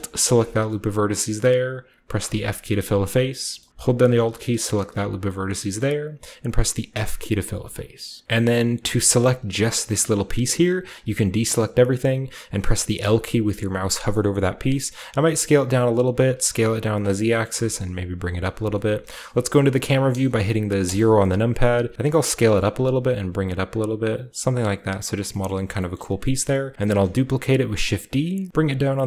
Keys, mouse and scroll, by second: 0.3 alt+right click, 2.1 f, 2.5-3.5 scroll down 1, 3.5-4.7 middle drag, 3.6-4.7 scroll up 1, 4.7 alt+click, 5.6-6.8 scroll up 1, 5.7-6.8 middle drag, 6.8 f, 8.2-9.1 scroll up 1, 8.2 a, 9.1-10.8 scroll up 1, 9.2 a, 9.6 a, 10.8 a, 11.0 a, 11.9-12.9 scroll up 1, 12.9-13.6 scroll up 1, 12.9-13.7 typing, 13.7-14.3 scroll down 1, 14.3 middle click, 14.3 scroll up 1, 14.8-16.4 typing, 15.2 click, 15.5-16.2 scroll up 1, 17.1-18.1 scroll down 1, 17.1 click, 17.4 g, 17.6 z, 19.0 KP_0, 20.0-23.4 typing, 22.1-26.6 drag, 24.4-24.9 scroll down 2, 24.9-25.4 scroll up 2, 25.1-26.8 typing, 25.4 shift+middle click, 25.9 shift+middle click, 26.6 scroll up 1, 28.4 typing.